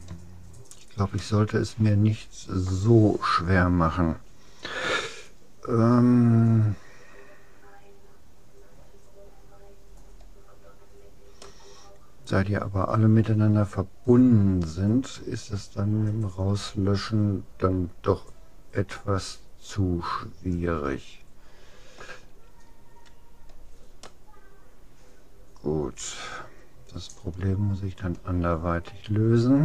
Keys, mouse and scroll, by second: 0.4-3.0 middle drag, 11.4-13.2 middle drag, 23.2-24.2 scroll down 1, 24.2-25.8 middle drag.